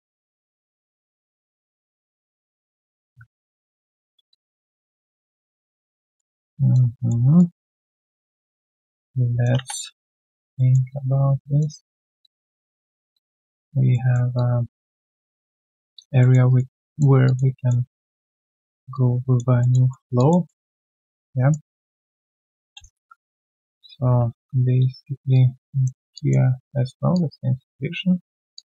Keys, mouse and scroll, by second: 0.8 alt+scroll down 1, 1.1 alt+click, 4.3 alt+click, 5.1 alt+middle click, 5.8 alt+click, 6.0 alt+right click, 6.5 alt+click, 6.9 alt+middle click, 7.2 alt+right click, 7.6 alt+click, 8.1 alt+right click, 8.4 alt+click, 10.0 alt+click, 10.5 alt+middle click, 10.9 alt+click, 12.2 alt+click, 12.5 alt+middle click, 12.8 1, 13.1 alt+click, 13.9 alt+middle click, 14.3 alt+click, 15.5 alt+scroll down 1, 15.8 alt+click, 16.2 alt+middle click, 16.4 alt+right click, 16.7 alt+click, 17.5 alt+middle click, 18.2 alt+click, 18.6 alt+right click, 18.9 alt+click, 19.6 alt+middle click, 20.1 alt+click, 20.4 alt+middle click, 20.7 alt+click, 21.0 alt+middle click, 21.3 alt+right click, 21.6 alt+click, 21.9 alt+middle click, 22.2 alt+right click, 22.4 alt+click, 22.7 q, 22.8 right click, 24.3 ctrl+shift+q, 26.1 alt+click, 28.5 alt+click.